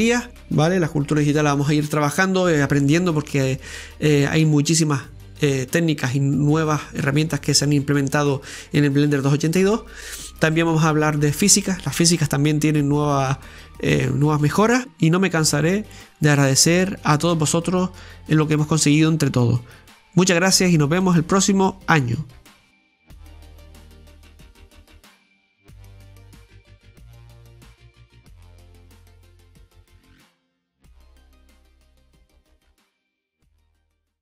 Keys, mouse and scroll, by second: 1.5-2.3 scroll up 6, 2.4-4.6 shift+middle drag, 4.6 s, 7.1 scroll down 2, 7.6 scroll down 1, 7.7-9.7 shift+middle drag, 9.7 Tab, 11.2-13.6 middle drag, 13.8 g, 15.9 e, 17.0-18.1 middle drag, 18.1 KP_7, 19.0 scroll up 1, 19.3-20.7 middle drag, 20.7 KP_7, 22.1 ctrl+KP_7, 23.0 scroll up 1, 23.2-24.5 scroll down 3, 24.5 o, 25.9 Tab, 27.4 shift+d, 28.6 click, 29.9-32.3 drag.